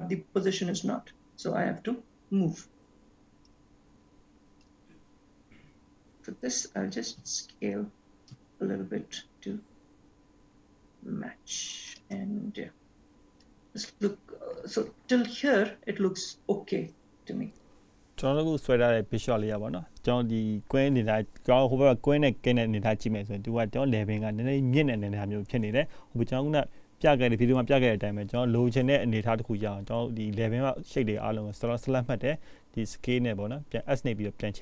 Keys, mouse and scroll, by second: 4.9 click, 13.6 click, 21.5-22.3 scroll down 1, 22.3 scroll down 2, 23.0-23.8 scroll up 2, 24.0 shift+middle click, 24.9-25.3 scroll up 1, 27.1-27.8 scroll up 2, 27.6 shift+middle click, 28.2-29.1 scroll up 1, 29.1 scroll down 1, 29.8 shift+middle click, 31.6 click, 33.7 click.